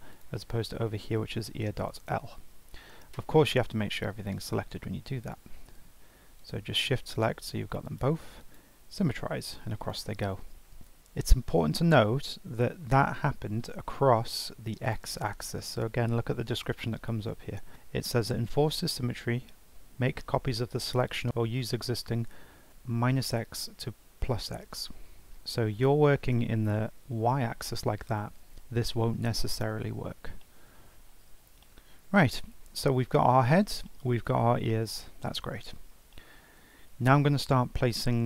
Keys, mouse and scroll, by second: 0.1 click, 0.5 F2, 2.5 ctrl+z, 2.9 ctrl+z, 3.3 ctrl+z, 3.7 ctrl+z, 4.0 ctrl+z, 5.2 shift+click, 6.4 shift+click, 7.1 shift+click, 7.8-9.8 right drag, 9.8 click, 10.5 g, 10.5-13.0 shift+middle drag, 14.8 click, 15.2-17.7 right drag, 26.8 alt+middle click, 30.4 alt+middle click, 31.0-31.3 scroll down 2, 31.3 scroll up 3, 31.6 shift+middle click, 32.3 scroll down 1, 32.5-32.8 scroll up 2, 32.8-34.8 shift+middle drag, 34.8-35.2 scroll down 1, 35.2 shift+middle click, 35.6-36.1 scroll up 3, 36.1-37.2 shift+middle drag, 37.2-37.5 scroll down 3, 37.7 scroll up 2.